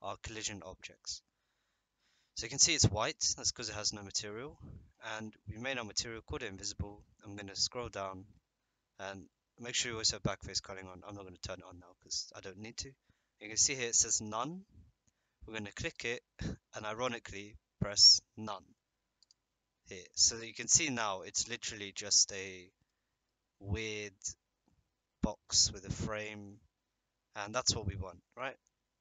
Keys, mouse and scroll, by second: 0.4-1.2 middle drag, 1.9 middle drag, 3.1 middle click, 15.9-19.3 drag, 20.4 middle click, 21.5-22.8 middle drag, 23.2-24.0 middle drag, 24.1-24.8 middle drag, 26.2-26.7 middle drag, 27.1-29.0 middle drag.